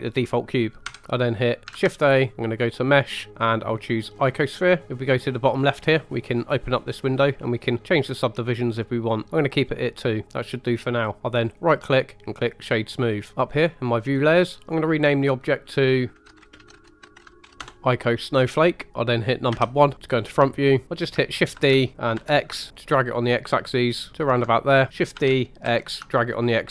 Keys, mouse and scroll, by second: 0.8 Delete, 1.7 shift+a, 6.3 click, 7.8 click, 9.2 click, 11.4 right click, 14.6 click, 14.8-17.6 drag, 18.9 middle click, 19.5 KP_1, 20.6 shift+middle drag, 21.6 shift+d, 22.1 x, 24.1 ctrl+click, 25.1 shift+d, 25.6 x.